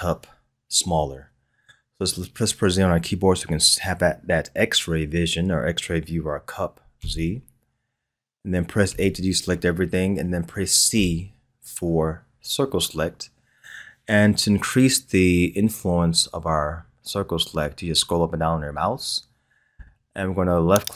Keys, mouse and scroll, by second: 7.0 z, 8.9 a, 10.9 c.